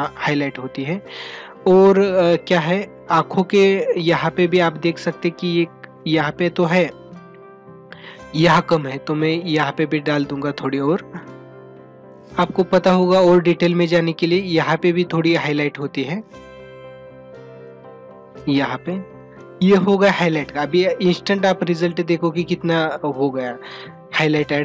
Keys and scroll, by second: 4.1 ctrl+-, 5.2 ], 19.7 ctrl+-.